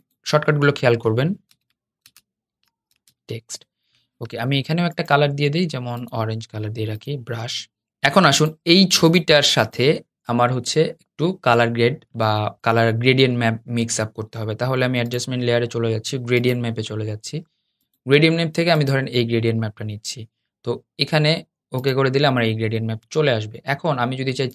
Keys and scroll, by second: 0.1 super+g.